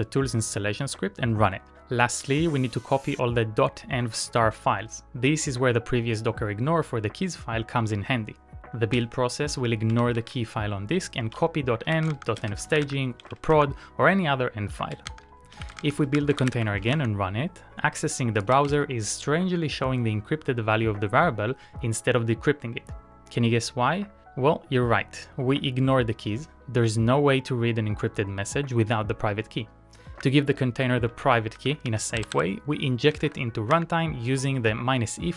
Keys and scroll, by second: 0.1 typing, 9.2-10.2 typing, 11.7-13.6 typing, 13.8 Return, 14.7 ctrl+a, 15.1-17.0 typing, 17.2 Return, 30.3 Return, 31.0-33.6 typing, 34.0 Return.